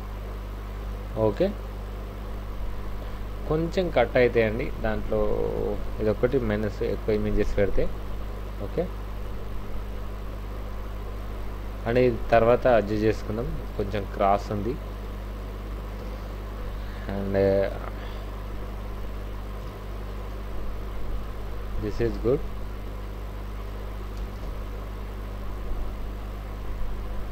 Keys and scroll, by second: 2.0 Down, 3.3 Right, 6.8 ctrl+shift+t, 9.6 ctrl+t, 11.9 Right, 12.8 Up, 13.3 Down, 13.7 Left, 14.4 Left, 16.0 ctrl+shift+t, 19.7 ctrl+t, 21.7 Down, 21.9 Down, 22.1 Left, 23.1 Left, 24.3 ctrl+shift+t.